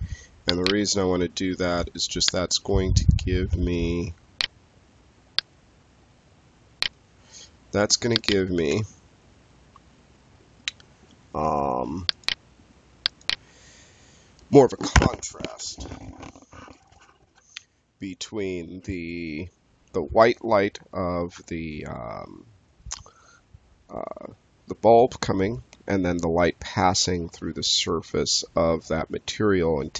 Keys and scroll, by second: 8.5 space.